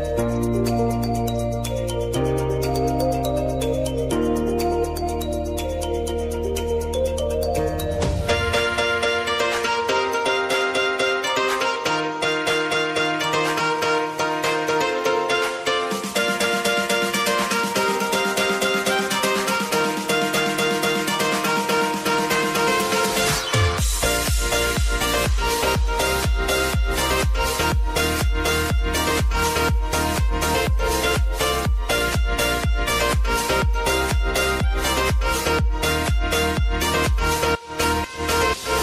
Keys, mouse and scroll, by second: 1.8 Return, 2.5-4.4 typing, 5.4 Return, 6.3 click, 7.2 ctrl+d, 8.6 click, 9.7 Return, 10.3-12.0 typing, 14.4-20.1 drag, 24.2 Return, 25.2 click, 26.0-26.3 alt+scroll up 1, 26.5-27.4 alt+scroll down 1, 28.0 click, 28.6 ctrl+d, 29.0 click, 34.1 click, 35.5-36.4 alt+scroll up 1, 37.4-38.8 drag.